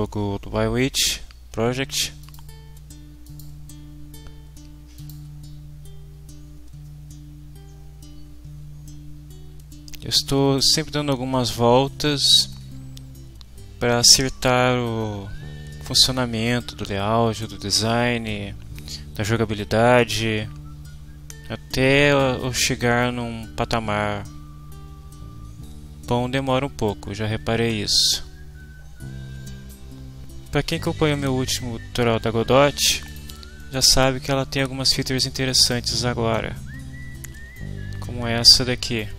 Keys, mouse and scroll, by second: 2.2 click, 3.2 click, 5.0 click, 33.0 click, 34.3-35.4 drag, 35.8 right click, 35.8 click, 35.9 right click.